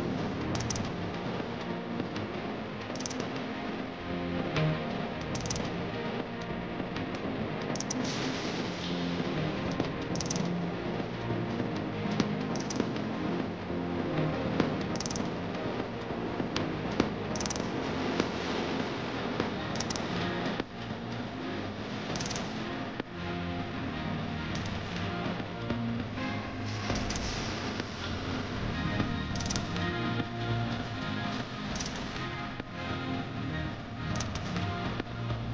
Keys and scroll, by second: 2.4 shift+F2, 12.2 Caps_Lock, 14.4 p, 15.9 space, 16.1 s, 20.5 space, 20.5 f, 21.4 space, 21.9 Return, 24.4 shift+4, 26.9 1, 29.9 BackSpace, 31.0 ,.